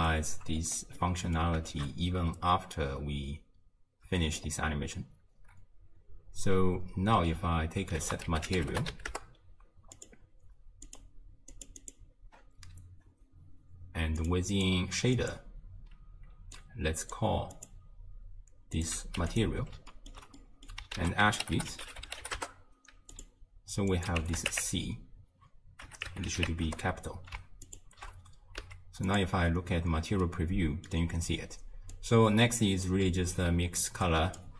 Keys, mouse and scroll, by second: 0.5-1.0 scroll up 4, 1.0-1.8 middle drag, 1.8 shift+space, 4.2 space, 4.4-7.4 scroll up 2, 7.4 scroll up 1, 8.0 ctrl+a, 10.9 click, 11.5 click, 11.8-14.3 drag, 14.5-19.2 drag, 19.2 q, 19.9-21.0 ctrl+middle drag, 21.0 ctrl+a, 21.6 t, 23.9-27.1 drag, 27.7 ctrl+shift+click, 28.6 z, 30.3-31.9 middle drag, 31.9 click, 34.1 drag.